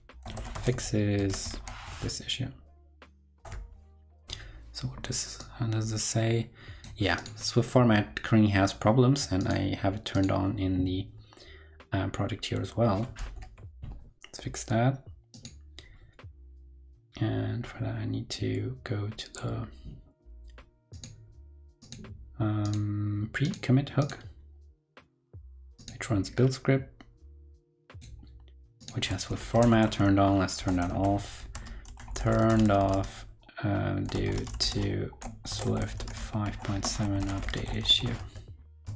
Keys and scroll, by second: 1.4 super+v, 3.3 super+Return, 13.8 ctrl+BackSpace, 29.3 super+Left, 38.1 super+s, 38.8 super+Tab.